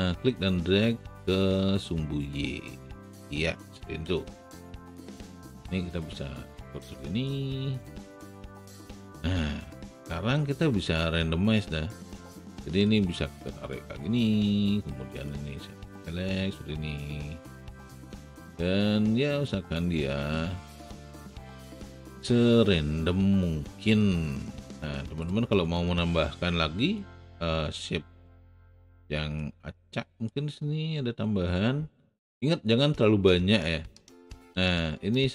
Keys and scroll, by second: 4.2 w.